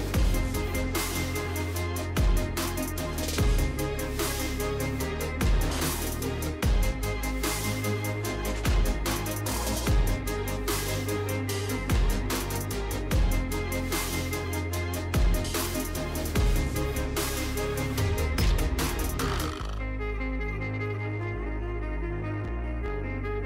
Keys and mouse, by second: 0.2 middle click, 1.9 2, 2.5 click, 3.3 click, 6.1 click, 7.1 middle click, 8.5 shift+middle click, 9.5-10.7 middle drag, 11.9 middle click, 16.5 click, 20.8 Tab, 22.4 click, 23.3 middle click.